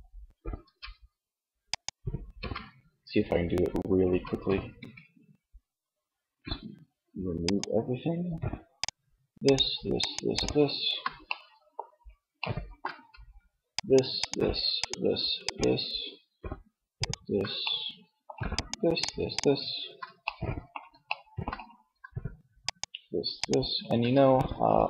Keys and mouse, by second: 0.0 ctrl+Tab, 1.7 Tab, 2.9 a, 3.7 a, 7.1-8.3 drag, 17.0-18.5 drag, 23.4-24.4 middle drag.